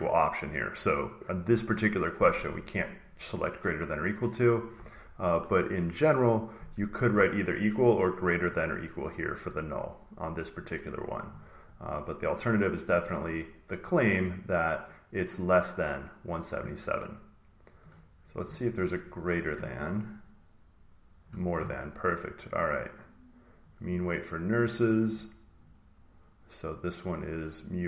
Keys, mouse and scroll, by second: 3.2 click, 8.0 click, 8.6 click, 12.6-14.4 drag, 18.0 click, 19.9-22.0 drag, 24.4-26.8 drag, 27.6-27.8 drag.